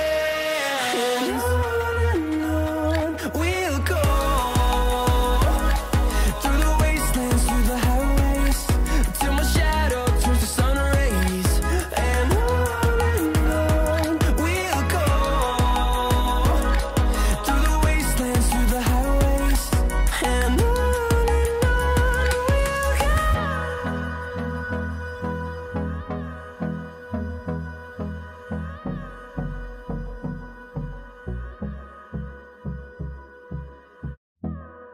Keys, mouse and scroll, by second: 0.5 right click, 1.8 click, 4.4-9.4 drag, 9.4 right click, 10.9 click, 11.0 click, 13.0 typing, 13.9 right click, 15.1-19.0 drag, 19.5-29.8 drag, 19.5 typing, 29.9 click, 30.1 click, 32.3 typing, 32.7-34.9 drag.